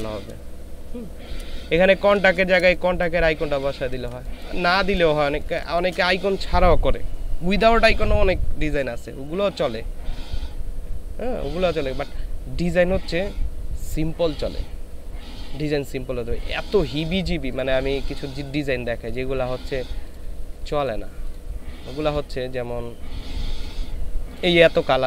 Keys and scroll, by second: 1.6 ctrl+space, 2.6 space.